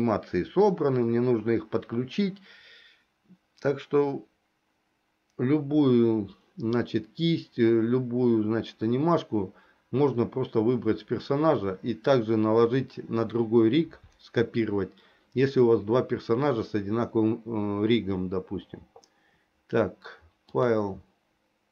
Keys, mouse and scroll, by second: 20.6-21.7 drag.